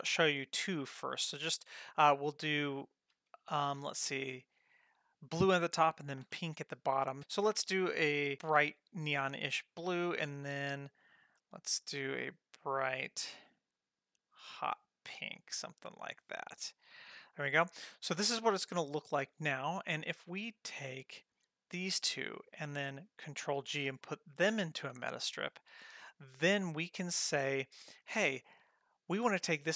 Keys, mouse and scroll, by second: 7.2-8.3 drag, 10.0 click, 11.4 click, 12.8-16.2 drag, 19.8 click, 21.4-21.9 drag, 23.8 ctrl+g.